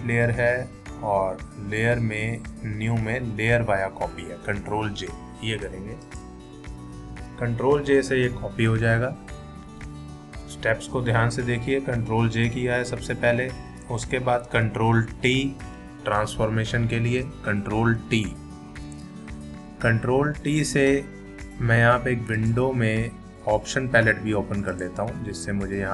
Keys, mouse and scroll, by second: 6.0 click, 15.4 ctrl+t, 22.4 click, 24.7 click.